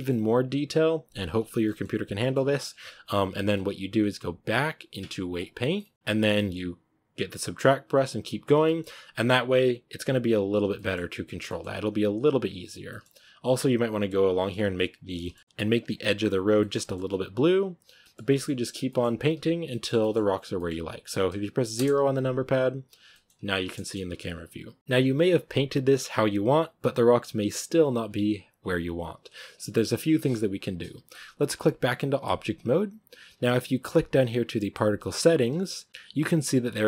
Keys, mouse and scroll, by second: 1.2-1.5 scroll down 2, 1.5 middle click, 2.2-3.0 scroll up 5, 5.3 click, 5.6-7.3 middle drag, 7.3-8.5 drag, 8.5 shift+middle click, 8.7 scroll up 1, 8.9-10.6 drag, 10.6-11.0 shift+middle drag, 11.0-11.3 drag, 11.3-11.7 shift+middle drag, 11.7 scroll up 1, 11.9-12.5 drag, 12.5 scroll down 1, 12.7-13.2 middle drag, 13.2-15.1 drag, 15.1-15.8 shift+middle drag, 15.8 click, 16.4-17.0 shift+middle drag, 17.0-17.6 drag, 17.6 scroll down 1, 17.9 shift+middle click, 18.7 scroll down 1, 18.7-20.2 shift+middle drag, 20.2 scroll down 1, 20.4-21.6 middle drag, 21.6 KP_0, 23.0 shift+middle click, 23.5 scroll up 1, 23.6-32.2 shift+middle drag, 32.2-36.8 drag.